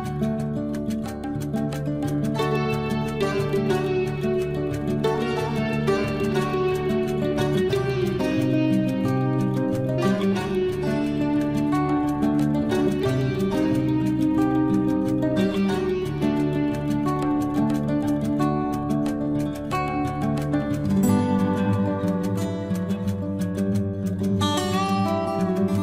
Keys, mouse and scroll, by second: 0.8 Escape, 1.3 click, 1.4 click, 2.6 Delete, 4.5 click, 5.4 Delete, 7.7 click, 8.9 Delete, 9.6 l, 15.1 click, 20.8 click, 21.8 Escape, 22.0-22.4 scroll down 1, 22.4 space, 22.8 click, 24.0 Delete, 24.5 scroll up 1.